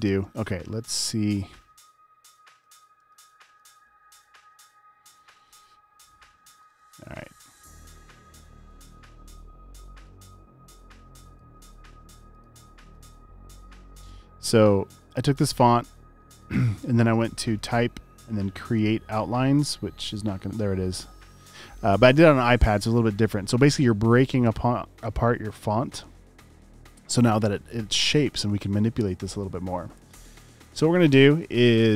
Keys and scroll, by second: 2.9 space, 3.6 space, 5.3 space, 6.8 space, 11.7 super+z, 15.2 v.